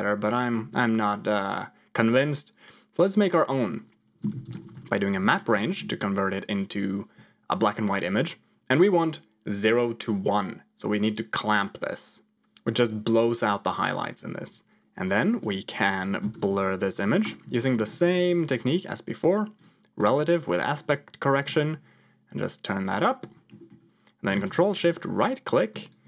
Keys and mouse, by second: 0.1 click, 0.6 ctrl+x, 3.2-4.9 drag, 5.6 ctrl+shift+click, 15.3-16.6 drag, 17.5 ctrl+shift+click, 17.8 middle click, 18.7 click, 19.5 click, 20.1 middle click, 21.1-23.1 shift+drag, 23.5 middle click, 24.4 ctrl+shift+click, 25.3 click.